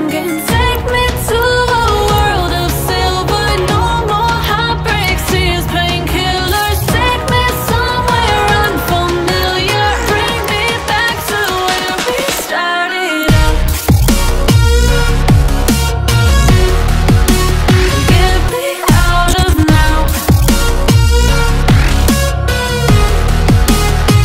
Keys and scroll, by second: 14.4 F2.